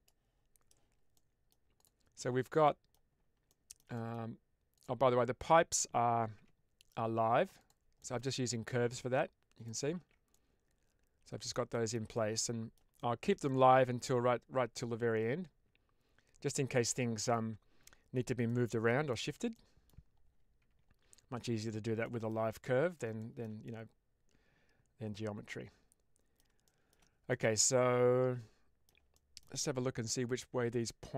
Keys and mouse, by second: 1.1 middle click, 1.7 click, 2.5 middle click, 3.5 shift+middle click, 3.8 middle click, 4.6 click, 6.2 Tab, 7.5 click, 7.9 middle click, 8.6 click, 9.9 ctrl+z, 10.2-11.5 middle drag, 11.6 middle click, 12.0 middle click, 12.9 shift+middle click, 13.3-17.2 middle drag, 18.3 middle click, 19.0 shift+middle click, 19.4 middle click, 20.6 Tab, 21.9-22.2 shift+middle drag, 22.4-22.8 middle drag, 23.1 shift+middle drag, 23.5-26.2 middle drag, 26.5 shift+middle click, 27.2-28.7 middle drag, 29.1 shift+click.